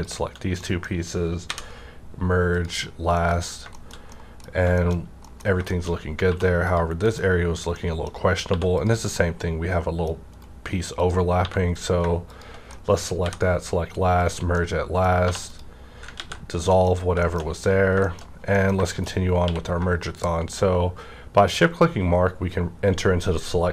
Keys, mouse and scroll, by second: 0.0 shift+click, 0.6 middle click, 1.5 m, 2.5 click, 2.6 click, 2.6 m, 2.9-3.7 scroll down 3, 3.1 middle click, 3.7 shift+middle click, 4.4-5.0 scroll down 3, 4.8 shift+middle click, 5.2 middle click, 5.5 scroll down 1, 5.6 scroll up 4, 5.7 middle click, 5.7 shift+middle click, 6.2 2, 6.6 click, 7.0 KP_Decimal, 7.4 scroll down 1, 7.7 middle click, 8.2-8.5 scroll up 1, 8.5 2, 8.7 click, 9.0-11.0 middle drag, 10.3 right click, 11.0 click, 11.4 1, 11.7 click, 12.3 shift+click, 12.7-14.2 middle drag, 13.2 m, 14.2 click, 14.5 middle click, 14.6 click, 15.2 2, 15.5 click, 16.2 ctrl+x, 16.6 middle click, 16.8-18.1 scroll down 6, 17.2 shift+middle click, 18.0 shift+middle click, 18.3 scroll up 1, 18.5 middle click, 18.9 shift+middle click, 19.1 scroll up 1, 19.4 q, 21.4 click.